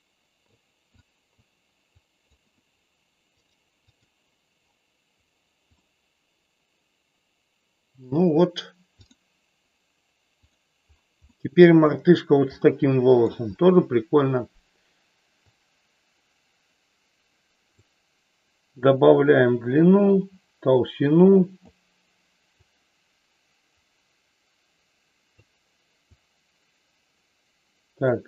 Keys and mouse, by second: 1.0 click, 2.0 click, 3.3-4.3 drag, 5.8-8.0 middle drag, 10.4 click, 11.3 middle click, 12.6 middle click, 15.4-17.8 drag, 18.8-21.8 drag, 22.5-25.4 drag, 26.0-28.0 drag.